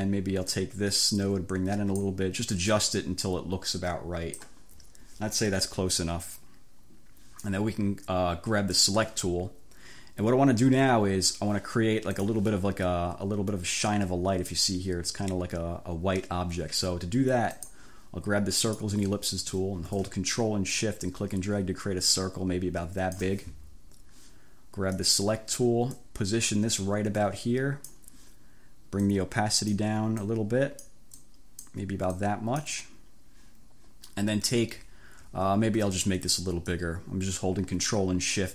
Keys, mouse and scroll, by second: 0.6-2.2 drag, 2.8-4.7 drag, 8.8 click, 12.2 click, 17.7 click, 18.8 click, 20.8-23.4 ctrl+shift+drag, 25.1 click, 26.0-28.2 drag, 29.1 click, 30.3 click, 31.2 click, 32.2 click, 36.7-38.5 ctrl+shift+drag.